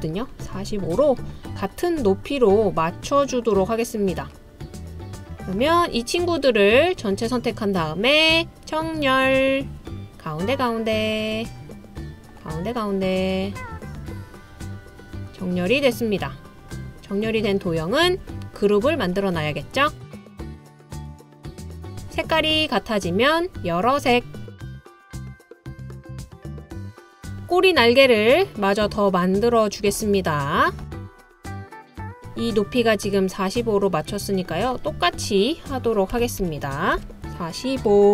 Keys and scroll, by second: 36.2-37.0 typing.